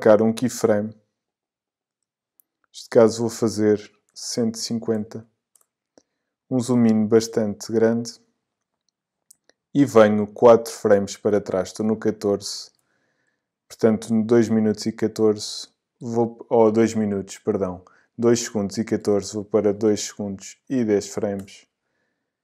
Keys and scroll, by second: 4.1 i, 6.1 Return, 19.1 BackSpace, 21.4 Return.